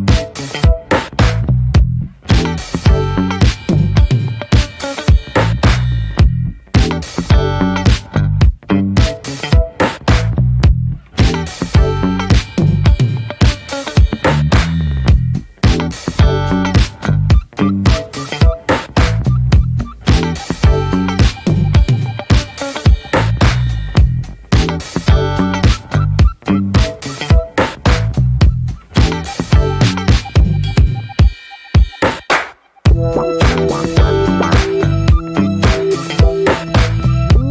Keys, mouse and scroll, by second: 0.3 Tab, 0.5 click, 0.7 scroll down 2, 0.9 middle click, 1.2 ctrl+s, 1.9-3.0 middle drag, 3.0 Tab, 3.7 /, 4.2-4.7 drag, 4.7 Tab, 5.2 Tab, 5.3 drag, 5.6 scroll up 3, 5.9 ctrl+s, 6.0 drag, 6.3-6.6 middle drag, 6.6 ctrl+s, 7.3 /, 7.6 middle click, 7.9 Tab, 8.1-9.0 middle drag, 9.0-9.8 drag, 9.8-11.0 middle drag, 11.0 alt+shift+click, 11.4-12.6 middle drag, 12.6-13.0 alt+shift+drag, 13.0-14.4 right drag, 14.4 a, 15.0-15.6 right drag, 15.6 ctrl+s, 15.9 middle click, 16.1 Tab, 17.0 /, 17.2-17.7 scroll down 1, 17.7 ctrl+s, 17.9 click, 18.1 middle click, 18.5 ctrl+s, 18.6 click, 18.8 scroll down 2, 19.0 shift+middle click, 19.8 ctrl+s, 20.4 /, 20.7 middle drag, 21.0 Tab, 21.3-21.7 middle drag, 21.7 click, 22.4 3, 22.5 drag, 22.8 middle click, 23.3 scroll up 1, 23.5-23.9 middle drag, 23.9-24.2 shift+drag, 24.2 middle click, 24.3 scroll up 1, 24.6 x, 25.3-25.8 drag, 25.8 middle drag, 26.0 scroll up 1, 26.1-26.6 shift+middle drag, 27.1 shift+middle drag, 27.3 scroll up 2, 28.1 3, 28.3-29.4 drag, 29.4 2, 29.5-31.4 drag, 31.4-31.9 right drag, 31.9 scroll down 2, 32.1 middle click, 32.3 a, 32.7 right click, 33.2 scroll down 1, 33.3-33.8 shift+middle drag, 33.8 scroll up 1, 34.0 ctrl+s, 34.0 click, 34.4 /, 34.7 middle click, 34.9 scroll up 1, 35.1 ctrl+s, 35.5-35.8 scroll down 1, 35.8-36.4 shift+middle drag, 36.4 ctrl+s, 36.7 shift+middle drag, 36.8-37.2 scroll up 2, 37.2 Tab.